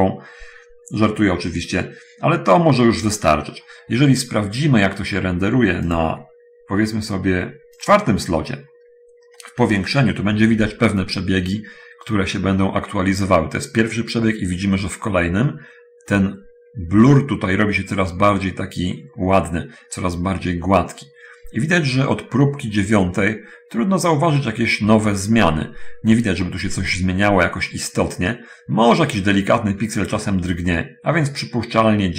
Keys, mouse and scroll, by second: 6.1 click, 8.1 click, 8.9-9.6 scroll up 1, 10.9 F12.